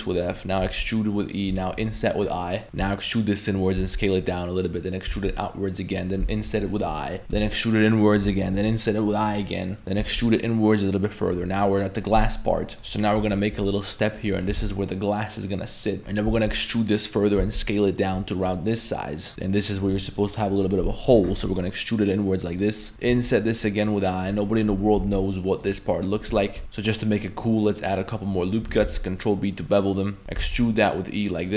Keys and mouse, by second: 0.2 middle click, 0.6 e, 1.8 i, 3.8 s, 5.1 e, 6.5 i, 7.3 e, 8.5 i, 10.0 e, 12.8 i, 13.2 i, 14.5 e, 16.3 e, 17.4 s, 19.0 middle click, 19.4 middle click, 21.1 e, 22.6 middle click, 22.9 g, 23.1 i, 25.0 e, 26.4 shift+middle click, 26.6 ctrl+r, 28.9 ctrl+b, 30.4 e.